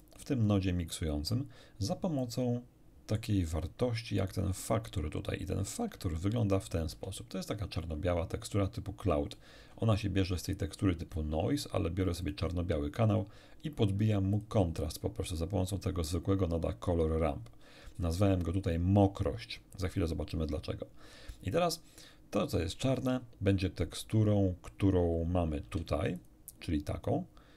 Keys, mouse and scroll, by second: 0.0 click, 2.2-3.4 middle drag, 6.3 ctrl+shift+click, 10.0 ctrl+shift+click, 12.2 ctrl+shift+click, 14.3 ctrl+shift+click, 26.2 ctrl+shift+click.